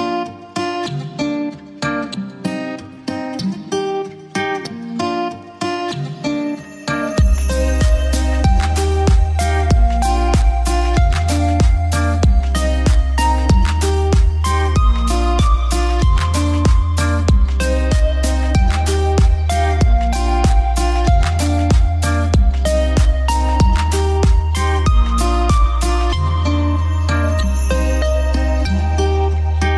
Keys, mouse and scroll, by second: 0.9 click, 2.0 F3, 4.9-6.9 drag, 7.3 shift+F2, 8.3 click, 9.6 shift+Page_Up, 11.1-13.1 drag, 13.2 F2, 13.4-16.4 drag, 16.4 ctrl+g, 16.9 shift+click, 17.1 c, 18.0 click, 18.2 F3, 19.7-21.1 drag, 21.1 F2, 21.3-23.1 drag, 23.1 shift+Page_Up, 24.4-27.4 drag, 27.4 F3.